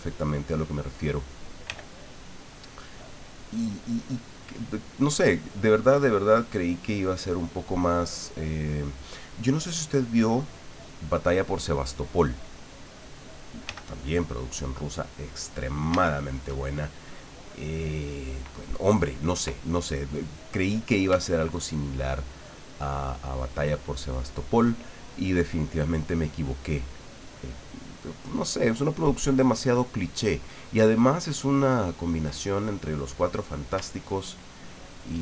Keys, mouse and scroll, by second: 0.2-0.8 scroll up 1, 1.7 f, 2.8 click, 4.2-7.9 drag, 11.2 click, 12.2 click, 13.7 f, 15.5 click, 16.1-17.3 shift+middle drag, 17.4 middle click, 21.2-32.3 ctrl+drag, 32.5 ctrl+click, 34.3-35.2 ctrl+drag.